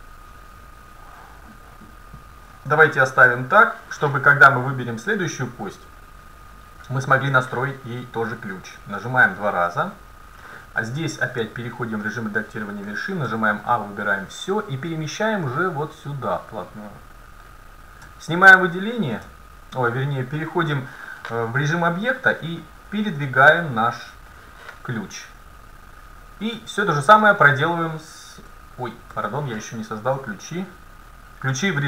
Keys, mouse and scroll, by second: 4.9-6.9 right drag, 9.1-11.6 drag, 11.4 Tab, 12.9 middle click, 13.3 a, 14.2-16.5 drag, 18.1 Tab, 19.3 Tab, 20.7 middle click, 22.6-24.5 drag, 25.7-27.7 right drag, 26.6 Tab, 28.5 a, 29.3 a, 31.6 Tab.